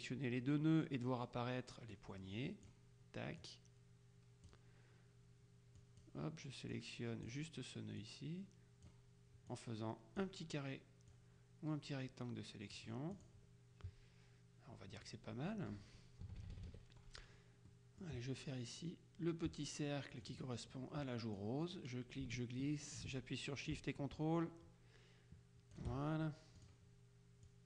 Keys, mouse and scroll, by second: 2.1 click, 3.5-5.1 drag, 5.9 click, 6.9 click, 8.1-9.5 drag, 9.6 click, 11.2-13.9 drag, 16.3 KP_Subtract, 17.8 click, 20.3 click, 21.5-26.3 drag, 26.7 click, 27.5-27.6 drag.